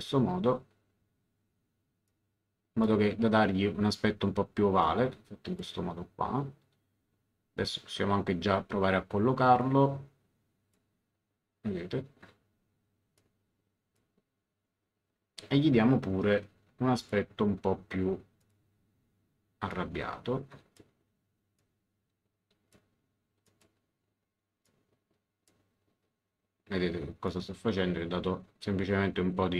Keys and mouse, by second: 2.0 click, 4.8 click, 9.6 click, 13.1 click, 17.0 click, 18.4 click, 19.7 click, 21.5 click, 23.4 click, 24.6 click, 27.2 click.